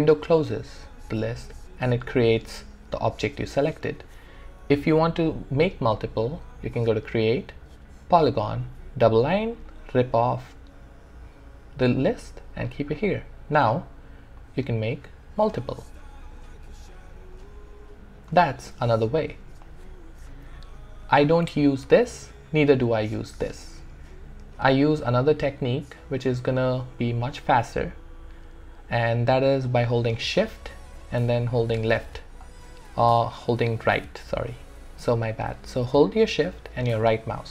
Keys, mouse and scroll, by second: 6.8 click, 9.6-26.0 drag, 17.5 typing, 30.4 typing, 31.7-33.3 shift+drag, 33.3-37.5 shift+right drag.